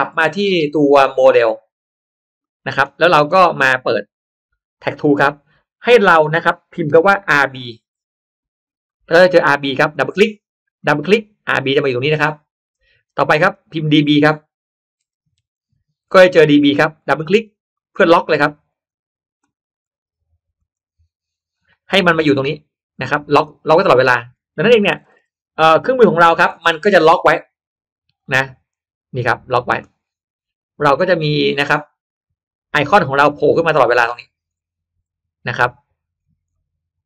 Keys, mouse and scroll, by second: 0.2-1.5 drag, 2.3 drag, 4.2 click, 5.7 click, 7.5 r, 8.0 b, 9.8 click, 10.7 click, 13.3 click, 13.7 click, 15.0 d, 15.3 b, 16.3-16.9 middle drag, 16.3-16.9 scroll down 1, 16.9 click, 17.1 click, 17.7 click, 18.6 click, 19.7 click, 19.9 click, 20.5 click, 21.4 click, 21.7 click, 21.8 middle click, 23.8 click, 26.0-27.0 scroll down 1, 28.1-29.4 drag, 29.9-30.3 scroll down 1, 31.6 click, 32.8 scroll down 1, 33.3-34.2 scroll up 1, 34.4-34.7 scroll up 1, 35.1-35.4 scroll down 1, 36.1-36.4 scroll down 1.